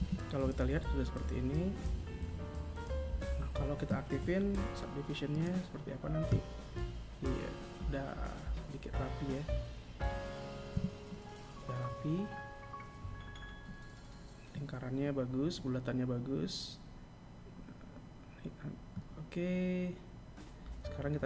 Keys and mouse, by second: 2.7 click, 5.2 click, 10.6 Tab.